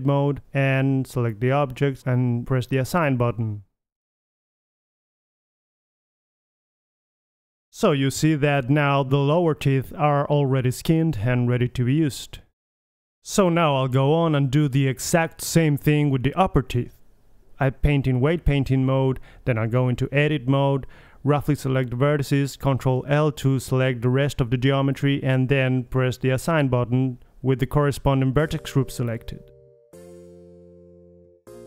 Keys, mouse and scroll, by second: 0.4 middle click, 0.8 Tab, 2.8 ctrl+l, 3.7 click, 4.2 middle click, 5.0-6.6 middle drag, 6.6 ctrl+l, 7.0 middle click, 7.6-8.4 drag, 8.4 middle click, 9.4 Tab, 9.6-10.3 middle drag, 10.3-11.7 drag, 11.0 g, 14.1-15.2 right drag, 14.8 KP_3, 15.2-16.6 middle drag, 16.6-17.2 drag, 18.2-18.9 middle drag, 19.5-20.9 middle drag, 22.5 Tab, 22.9 click, 23.3 c, 24.5 ctrl+l, 28.5 a, 29.6 c, 31.3 ctrl+l.